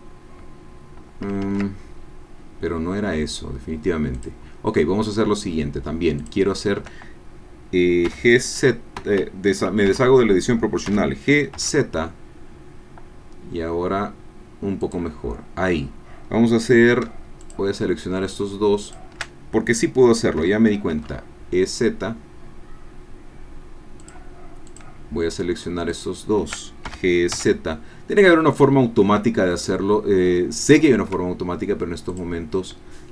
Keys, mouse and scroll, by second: 1.4 ctrl+z, 6.4 shift+click, 8.1 g, 9.0 Escape, 9.9 o, 10.9 g, 11.5 z, 14.8-17.1 drag, 17.4 shift+click, 18.8 shift+click, 20.5 e, 20.9 z, 24.0 click, 24.9 click, 26.2 shift+click, 26.8 shift+g, 27.3 shift+x, 27.4 shift+z, 30.6 shift+click, 32.1 click.